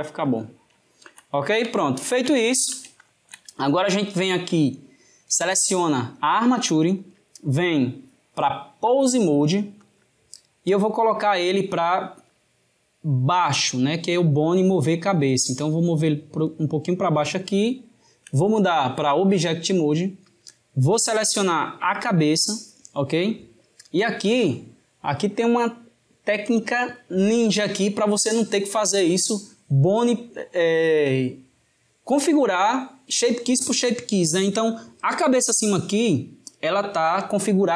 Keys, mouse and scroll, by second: 0.5-6.1 ctrl+middle drag, 6.1 click, 8.7-10.6 drag, 12.1 click, 17.6 shift+middle click, 18.6-21.3 drag, 23.1-26.2 middle drag.